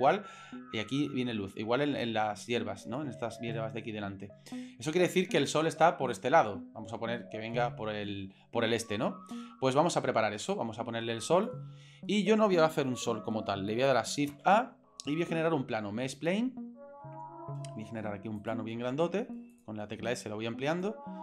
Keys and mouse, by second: 10.5 click, 14.3 shift+a, 16.9 s, 18.7 s, 20.9-21.2 drag.